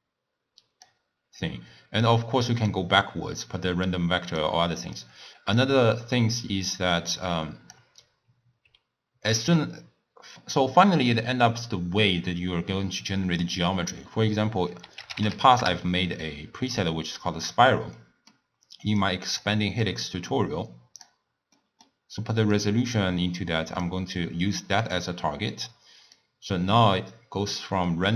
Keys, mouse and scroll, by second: 2.1-3.9 drag, 4.9 click, 6.8 click, 7.2-9.4 drag, 9.4 ctrl+a, 18.0-19.0 middle drag, 19.0 click, 19.9-21.6 drag, 21.6-22.6 middle drag, 22.6 drag, 26.2-28.1 drag.